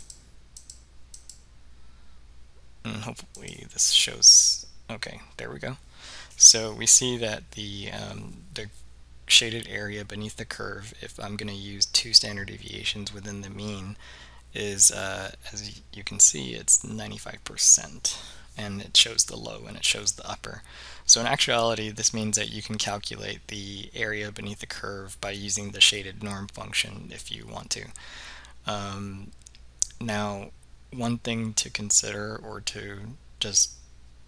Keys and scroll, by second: 0.1 Return, 0.7 Return, 1.3 Return, 3.4 Return.